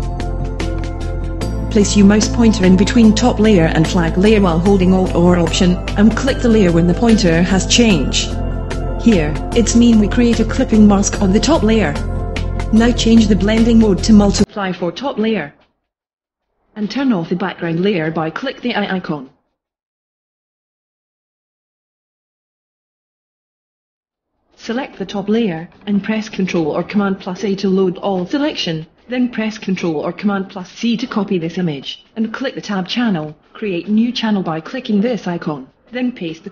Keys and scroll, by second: 27.4 super+a, 28.3 super+c.